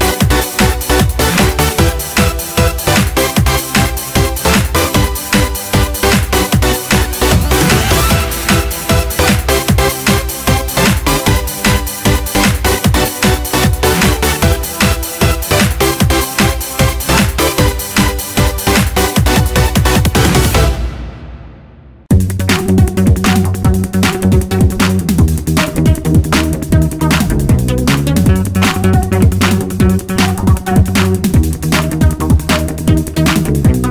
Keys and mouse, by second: 2.6-8.0 drag, 30.5-33.9 drag.